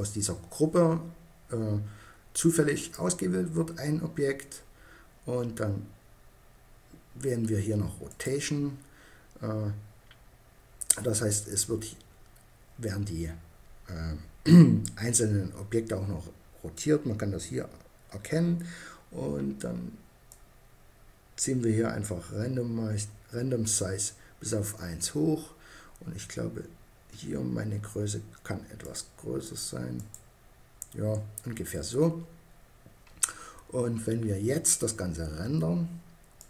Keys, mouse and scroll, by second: 2.2-3.9 drag, 7.5-9.3 drag, 19.7-21.4 drag, 28.2-31.1 drag, 35.8 middle click.